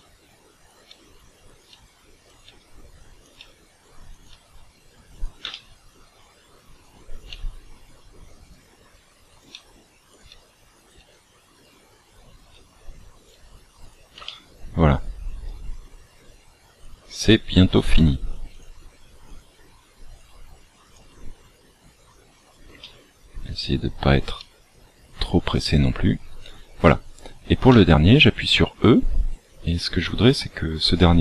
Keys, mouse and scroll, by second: 0.9 e, 2.5 e, 3.3 e, 4.3 e, 5.5 shift+middle click, 7.3 e, 8.6 e, 10.3 e, 10.9 e, 12.5 e, 13.3 e, 14.2 shift+middle click, 15.4 e, 17.0 e, 18.7 e, 19.4 e, 21.0 e, 22.7 shift+middle click, 24.3 e, 27.6 e.